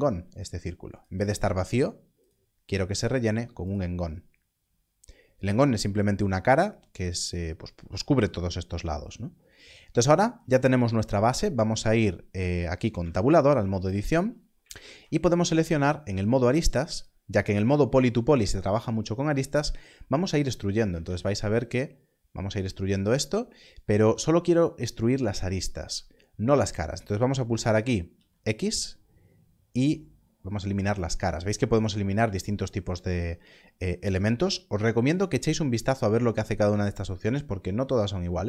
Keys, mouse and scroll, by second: 0.9 click, 10.3 click, 13.9-14.5 scroll, 16.9 alt+click, 22.9 click, 28.0 click, 30.9 click.